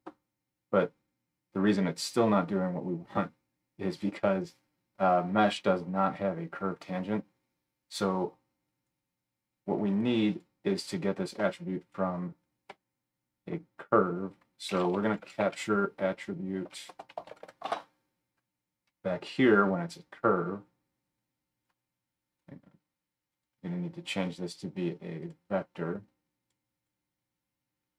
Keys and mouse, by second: 10.0-11.9 middle drag, 11.9-20.9 drag, 12.7 F3, 17.4 t, 20.9-22.5 middle drag, 22.3-27.9 drag, 22.3 right drag.